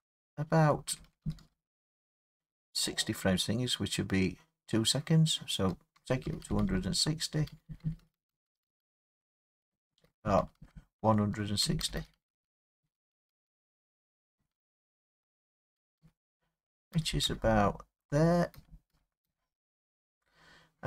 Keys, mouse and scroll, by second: 0.9 Right, 0.9 Right, 1.1 Right, 1.2 Right, 1.4 Right, 1.5-5.7 Right, 6.0 Left, 6.3 Left, 6.5 Left, 6.6 Left, 6.7-7.5 Left, 7.7 Left, 7.8 Left, 8.0 Left, 8.2 Left, 8.3 Left, 8.5 Left, 8.7 Left, 8.8 Left, 9.0 Left, 9.2 Left, 9.4 Left, 9.5 Left, 9.7 Left, 9.9 Left, 10.1 Left, 10.2 Left, 10.4 Left, 10.6 Left, 10.7-11.4 Left, 11.6 Left, 11.8 Left, 12.0 Left, 12.2 Left, 12.3 Left, 12.5 Left, 12.6 Left, 12.8 Left, 13.0 Left, 13.1 Left, 13.3 Left, 13.5 Left, 13.7 Left, 13.9 Left, 14.0 Left, 14.2 Left, 14.4 Left, 14.6 Left, 14.7 Left, 14.9 Left, 15.1 Left, 15.2 Left, 15.4 Left, 15.6 Left, 15.8 Left, 16.0 Left, 17.0 Left, 17.3 Left, 18.6 Left, 18.9 Left, 19.3 Left.